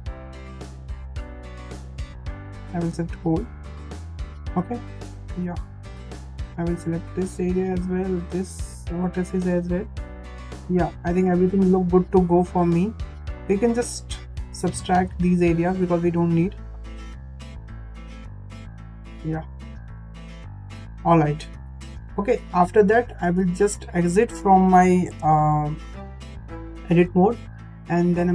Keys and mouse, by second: 3.7 shift+middle click, 5.0 shift+middle click, 6.1 shift+click, 8.2 shift+click, 11.0 shift+middle click, 11.8 shift+middle click, 12.7 middle click, 12.8 click, 13.3 ctrl+click, 15.5 ctrl+click, 17.1 ctrl+click, 19.5 ctrl+click, 23.4 click, 26.2 Tab.